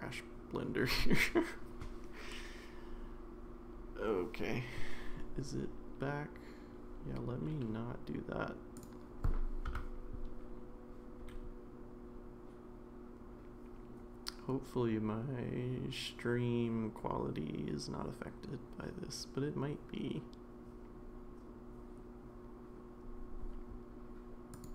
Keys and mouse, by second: 8.9-24.6 drag.